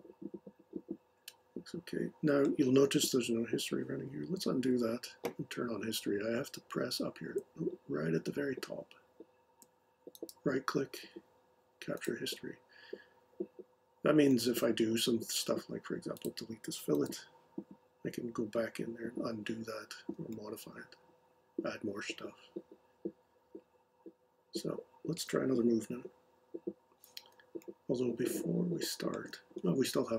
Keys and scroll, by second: 4.4 super+z, 16.9 BackSpace.